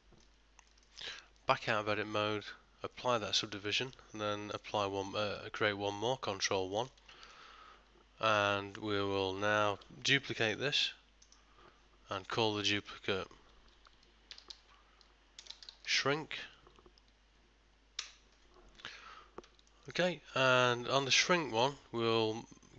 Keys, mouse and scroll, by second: 0.0 ctrl+middle click, 0.9 ctrl+middle click, 1.3 Tab, 3.0 click, 3.7 middle click, 4.6 ctrl+1, 5.4 middle click, 6.8 ctrl+middle click, 7.2 shift+middle click, 10.6 shift+d, 12.7 click, 13.7 click, 19.8 ctrl+middle click.